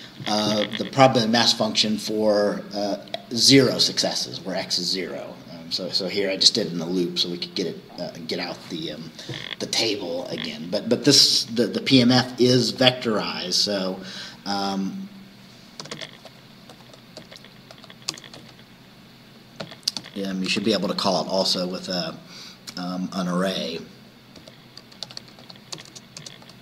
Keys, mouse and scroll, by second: 12.8 click, 15.9 Return, 16.8-18.4 typing, 19.7-22.4 typing, 24.2-26.0 typing.